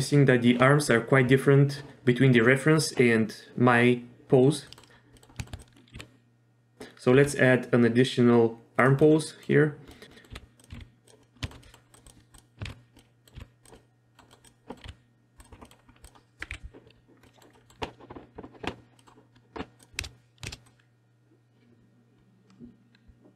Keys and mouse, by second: 4.7 middle click, 4.9 z, 5.1 middle click, 5.4 shift+middle drag, 5.9 r, 7.2 r, 9.0-9.4 middle drag, 9.9 middle click, 10.1 middle click, 10.3 r, 10.7 r, 11.4 shift+middle click, 11.6 middle click, 11.6 click, 11.9 click, 12.7 alt+r, 13.0 drag, 13.4 r, 13.7-14.2 drag, 14.7 middle click, 14.8 r, 15.6 middle click, 16.5 KP_3, 17.2 middle click, 17.5 middle click, 19.0 middle click, 20.0 shift+space, 20.5 shift+space, 20.6-23.3 drag.